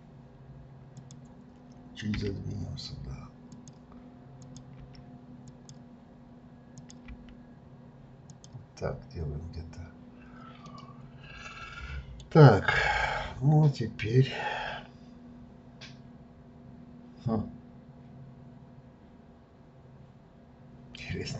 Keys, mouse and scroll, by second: 0.9 click, 2.1 g, 4.4 click, 4.7 g, 6.7 click, 7.1 g, 10.6-13.5 middle drag.